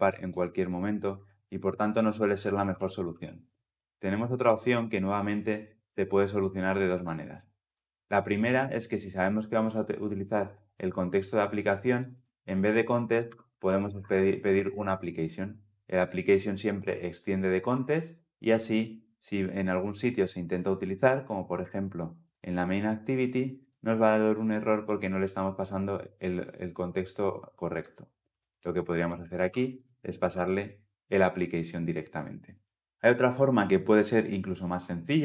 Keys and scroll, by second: 2.2 ctrl+z, 2.8 ctrl+z, 14.6 Return, 30.2 Return.